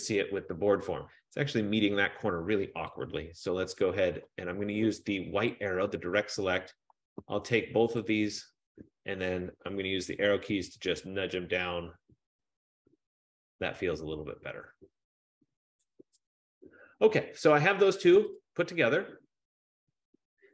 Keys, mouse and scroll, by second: 5.9 click, 6.9 click, 8.2 shift+click, 10.0 Down, 10.3 Down, 10.4 Down, 10.8 Down, 11.2 Down, 11.3 Down, 11.6 Down, 11.8 Down, 11.9 Down, 12.1 Down, 12.3 Down, 12.6 Down, 18.6 click.